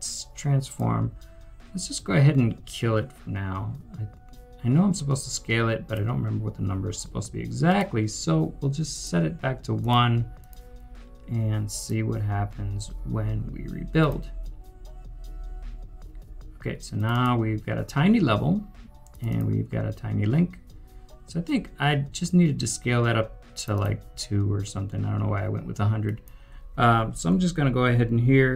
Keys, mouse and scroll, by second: 17.1 double click, 19.3 double click, 23.7 double click.